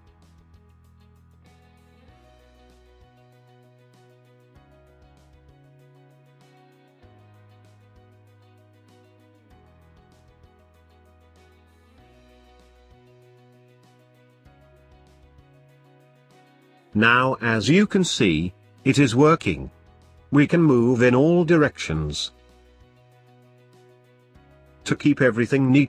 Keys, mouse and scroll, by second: 0.6-1.1 scroll down 6, 1.2-3.5 middle drag, 3.5-7.2 drag, 24.6 click.